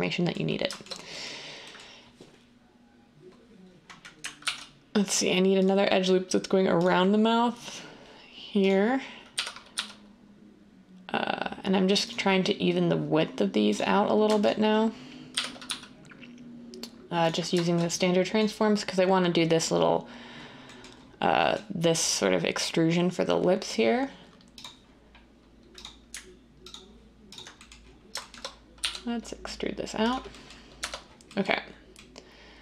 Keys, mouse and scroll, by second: 4.4 ctrl+r, 9.3-9.7 typing, 15.3-15.6 typing, 28.7 e, 30.7 Tab.